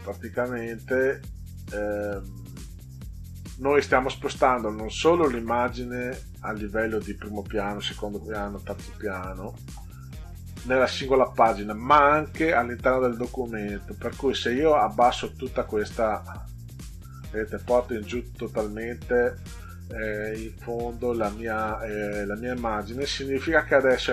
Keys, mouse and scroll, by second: 0.1 click, 0.3 click, 0.7 click, 1.4 click, 2.1 click, 15.5 click, 16.2 click.